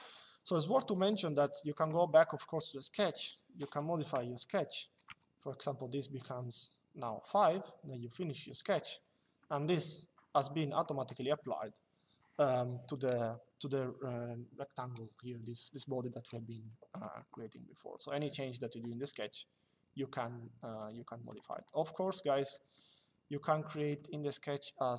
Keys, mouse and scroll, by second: 2.7 click, 3.8 KP_5, 7.9 click, 9.1 shift+middle click, 10.2 middle click, 21.0 click, 22.2 middle click, 23.6 click.